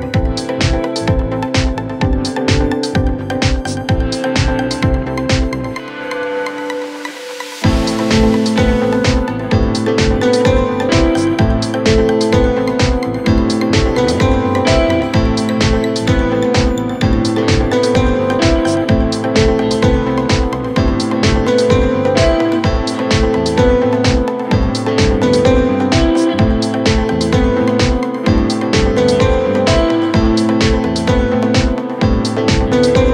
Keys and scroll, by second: 5.2 shift+F2, 5.6 Escape, 12.3-13.7 typing, 22.4 shift+Page_Up, 31.0 Escape.